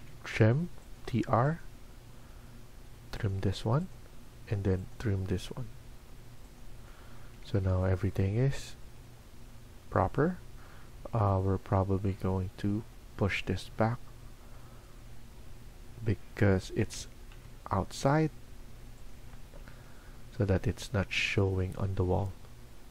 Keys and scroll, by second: 0.0-0.4 typing, 15.1 Escape, 16.7-17.2 typing, 19.3 Escape, 19.6 Escape.